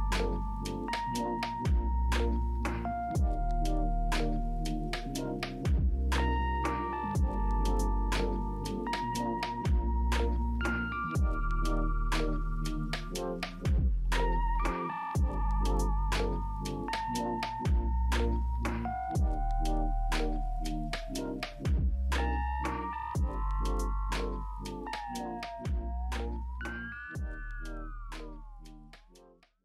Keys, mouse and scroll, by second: 15.4 ctrl+v, 16.2 Return, 25.2 middle click, 25.9 middle click, 27.4 w, 28.6 click.